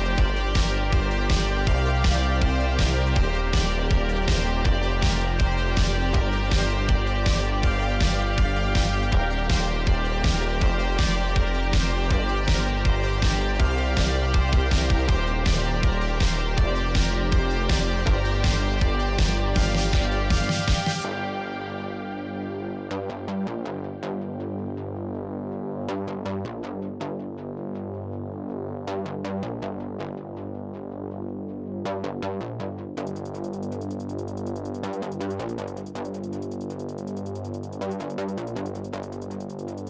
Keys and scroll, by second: 0.3 Tab, 1.6 shift+s, 2.0 Tab, 2.6 Tab, 3.1 2, 4.2 3, 4.9 shift+s, 5.3 Tab, 5.8 Tab, 6.4 shift+s, 7.9 Tab, 10.3 Tab, 11.4 Tab, 11.8 Tab, 15.9 shift+s, 16.4 Tab, 17.1 Tab, 17.8 shift+s, 18.9 g, 20.3 Tab, 20.8 Tab, 21.0 3, 21.8 shift+s, 22.0 Tab, 22.7 Tab, 23.5 shift+s, 23.9 Tab, 24.7 Tab, 25.2 2, 26.4 shift+s, 27.3 Tab, 28.3 Tab, 29.3 shift+s, 30.0 Tab, 30.9 Tab, 31.9 2, 34.7 shift+s, 35.2 Tab, 36.2 Tab, 38.1 shift+s, 38.6 Tab, 39.4 Tab, 39.6 2.